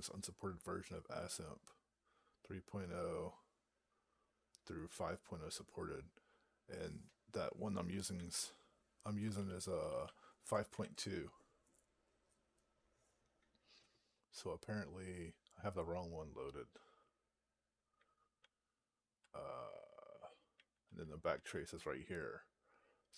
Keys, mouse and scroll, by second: 8.0 ctrl+e, 9.2 Left, 9.4 Left, 9.6 Left, 9.8 Left, 10.6 Right, 18.2-19.0 Down, 20.4 Down, 20.7 Down, 21.2 Down.